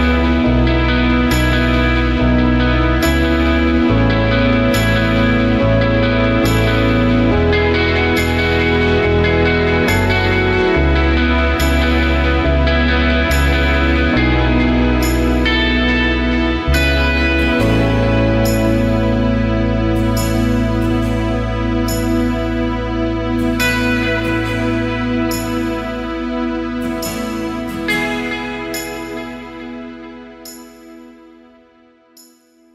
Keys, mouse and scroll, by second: 0.2 alt+scroll down 1, 0.4 space, 1.9 space, 2.1-2.7 alt+scroll up 2, 6.0 space, 7.4 space, 9.6 alt+scroll down 1, 10.1 ctrl+shift+a, 10.4 space, 11.5 alt+scroll up 1, 14.1 space, 17.2 ctrl+z, 19.2 ctrl+shift+a, 19.5 alt+scroll down 1, 19.7 space, 20.4-21.0 alt+scroll up 2, 21.1 space, 21.5 alt+scroll up 1, 27.3 alt+scroll down 1, 27.5 space, 28.1 alt+scroll down 1, 28.4-29.0 alt+scroll up 2, 29.4 alt+scroll up 1.